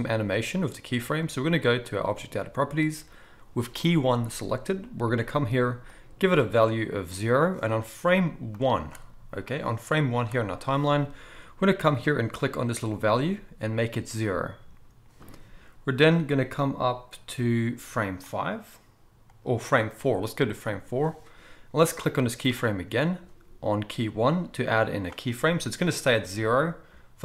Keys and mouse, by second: 5.9-13.3 drag, 13.3-18.2 middle drag, 18.2-22.7 drag, 22.7-26.2 middle drag, 26.2-27.2 drag.